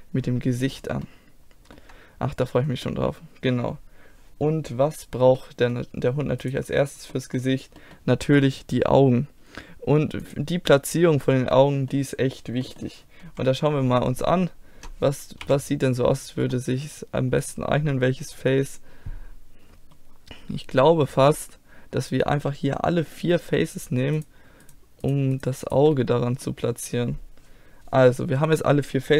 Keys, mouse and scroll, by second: 6.5-8.4 right drag, 8.6-9.6 drag, 10.2 click, 11.6-13.3 middle drag, 13.3 KP_1, 15.5 z, 17.5-18.8 middle drag, 18.8 click, 23.2-26.0 drag, 23.7-26.0 right drag, 26.0-29.1 middle drag.